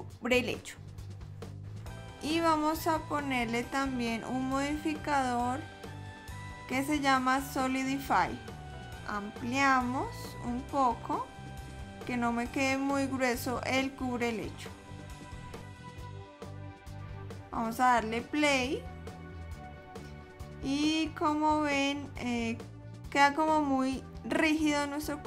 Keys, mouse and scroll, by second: 1.5 click, 5.9 click, 13.8 click, 18.3 click, 24.5 click.